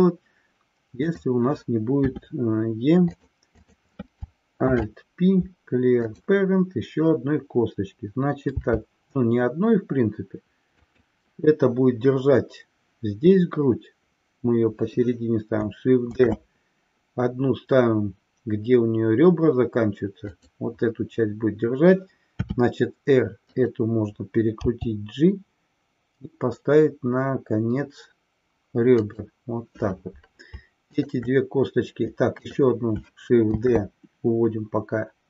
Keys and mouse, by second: 1.0 click, 3.3 click, 3.5 click, 4.8 alt+p, 16.2 shift+d, 20.3 click, 24.6 g, 32.4 click, 33.6 shift+d.